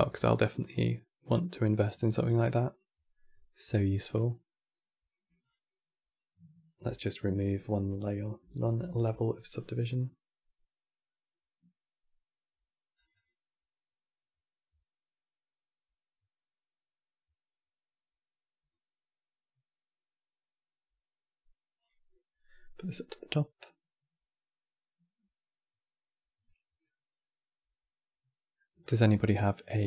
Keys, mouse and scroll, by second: 2.2 click, 3.7-7.8 drag, 11.7 click, 12.6-15.3 drag, 21.5 click.